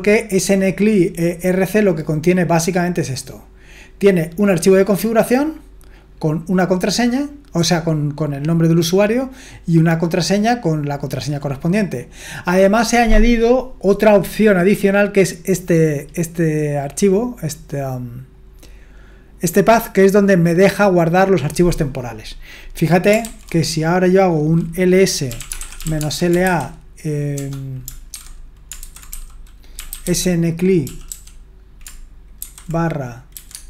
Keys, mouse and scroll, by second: 3.2 click, 4.4 click, 4.7 click, 4.9 click, 6.1 click, 6.4 click, 6.6 click, 7.6 click, 8.4 click, 9.6 click, 9.7 click, 10.5 click, 10.8 click, 12.8-15.7 scroll down 1, 15.7-17.1 drag, 17.7 click, 18.3 click, 21.7-23.2 drag, 23.2 ctrl+c, 25.0-31.1 typing, 32.2-33.3 typing, 33.5 Tab.